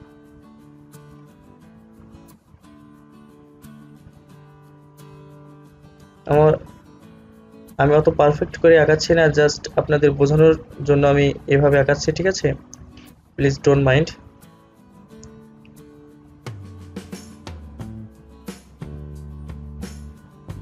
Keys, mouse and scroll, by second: 1.2 ctrl+z, 4.3-8.7 drag, 14.8-20.6 drag.